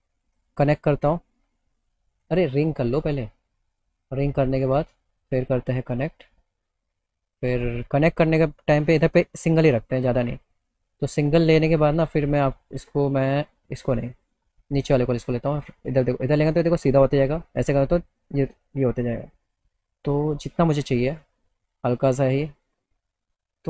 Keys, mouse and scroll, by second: 0.4 click, 2.9 click, 4.2 click, 5.2 right click, 6.4 click, 11.0-13.5 drag, 13.9 click, 14.7-17.2 drag.